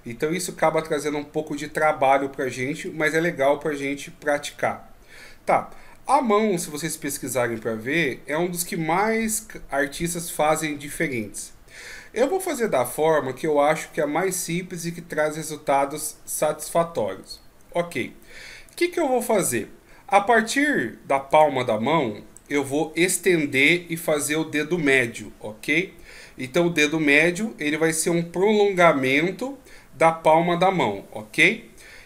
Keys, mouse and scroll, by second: 4.8-5.3 scroll up 1, 18.7 right click, 19.4 middle click, 21.3 right click, 31.8 KP_1.